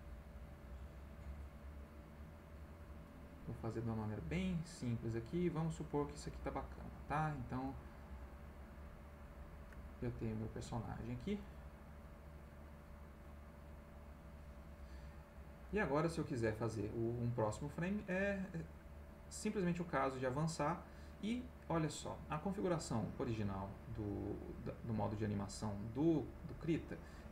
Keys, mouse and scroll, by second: 1.1 click, 2.3 click, 3.8 click, 6.3 click, 7.7-9.1 drag, 9.2 click, 10.2 ctrl+middle click, 10.2-10.8 ctrl+scroll up 2, 10.4 ctrl+middle click, 11.4 click, 14.2 click, 14.6 click, 15.9 middle click, 18.6-21.1 drag.